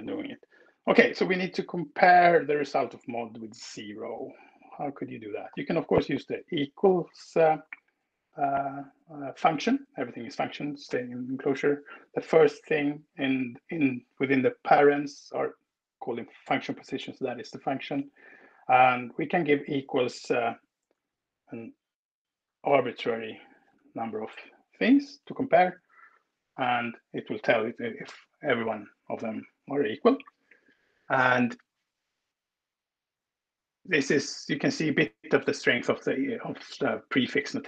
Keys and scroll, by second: 0.0 Right, 0.6 Left, 3.7 Return, 5.0 shift+8, 5.4 shift+0, 18.0 space, 21.0-23.6 typing, 25.4 alt+Return.